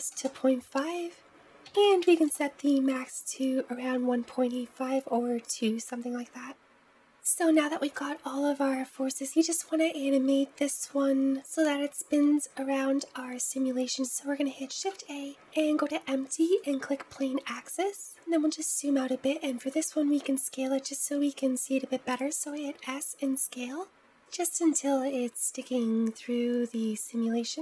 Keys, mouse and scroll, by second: 6.5 middle click, 9.2 click, 13.9 click, 14.6 shift+a, 18.4-20.9 scroll down 2, 22.1 s, 24.7-27.6 scroll up 2.